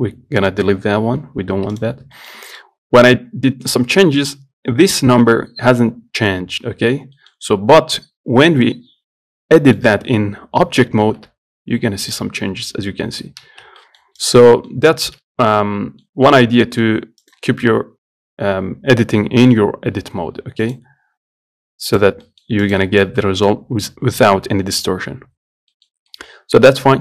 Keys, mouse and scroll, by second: 0.1-1.4 scroll down 2, 1.4 Delete, 1.7-2.0 scroll up 1, 2.0 click, 2.4-7.8 shift+middle drag, 7.8-9.8 scroll down 1, 9.8-11.3 middle drag, 11.3 s, 13.7 ctrl+z, 14.0 middle click, 14.4 click, 14.7 middle click, 15.0 scroll up 2, 15.3-17.4 shift+middle drag, 17.4 click, 20.9-22.2 drag, 22.5 middle click, 22.9 click, 25.7 scroll down 2, 26.0-27.0 middle drag.